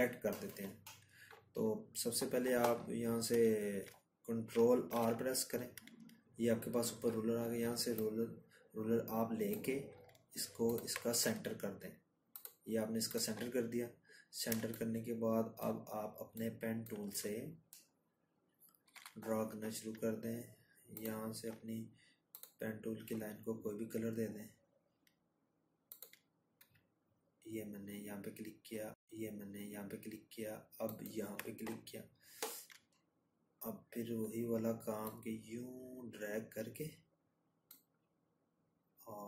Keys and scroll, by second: 2.7 ctrl+r, 16.7 p.